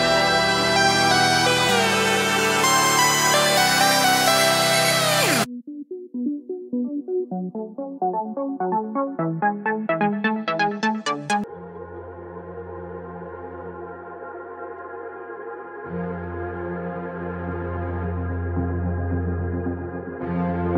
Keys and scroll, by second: 5.9 space, 6.7 Home, 16.1 space, 17.0 Home.